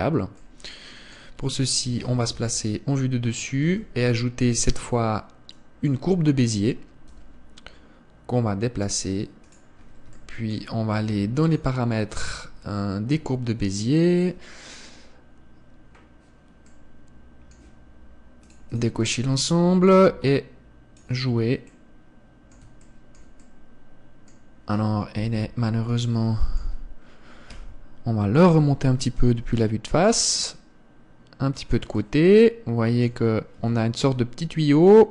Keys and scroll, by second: 3.0 KP_7, 4.2 shift+a, 7.7 g, 25.8 KP_1, 28.1 g.